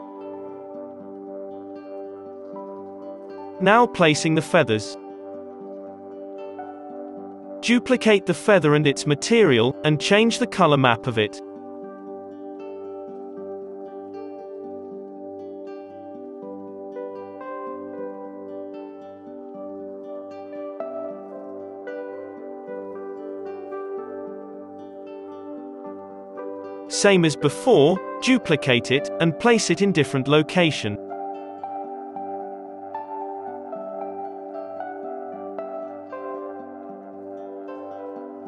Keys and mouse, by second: 0.2-1.5 middle drag, 1.2 g, 2.0 middle click, 2.0 KP_3, 2.2 KP_7, 2.7 g, 3.5 ctrl+2, 3.8-6.0 typing, 4.7 ctrl+z, 4.7 middle click, 7.5 KP_7, 7.9 shift+d, 9.3 click, 10.6-11.7 drag, 10.6 s, 12.0-19.0 drag, 14.6 z, 14.6 n, 14.9 alt+a, 17.9 alt+a, 19.2-29.9 typing, 19.5 click, 19.5 middle click, 29.6-30.6 drag, 31.2 click, 31.2 g, 31.8 g, 31.9 middle click, 31.9 s, 32.3 s, 32.9 click, 33.4 ctrl+z, 33.4-34.9 typing, 33.9 middle click, 37.3 click, 37.3 z, 37.4-38.4 drag, 37.9 n.